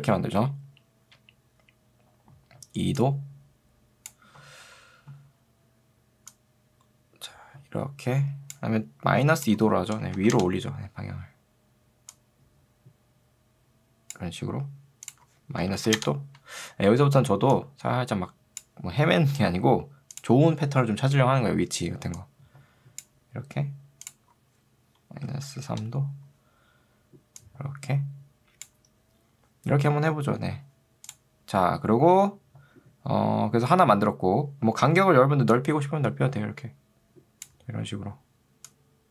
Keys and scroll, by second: 4.5 ctrl+z, 16.1 Return, 25.7 Return.